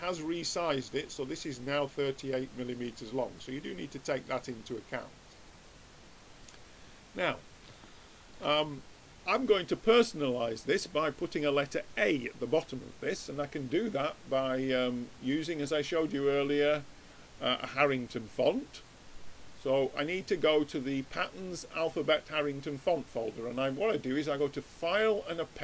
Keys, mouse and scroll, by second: 5.4-7.2 drag, 7.8-14.4 middle drag, 15.3 click, 23.1-24.9 drag.